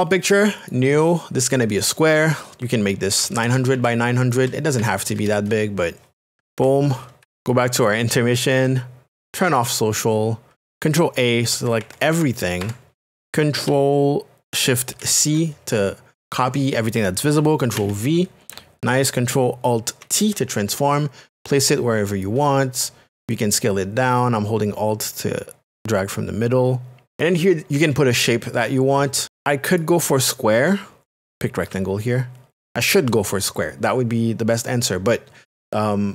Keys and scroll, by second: 3.1 KP_9, 3.3 KP_0, 3.7 Tab, 4.8 KP_9, 5.0 KP_0, 11.0 ctrl+a, 16.2 shift+c, 17.8 ctrl+v, 20.8 alt+t.